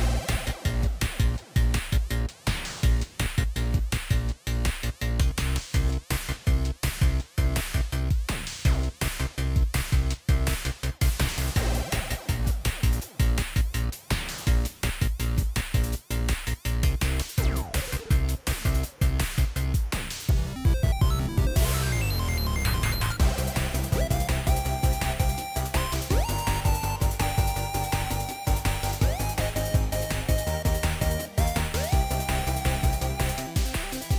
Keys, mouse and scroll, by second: 1.0 Delete, 3.2 ctrl+i, 4.8 ctrl+i, 6.0 ctrl+i, 6.2 shift+click, 6.8 right click, 9.5 right click, 9.9 ctrl+t, 10.5 right click.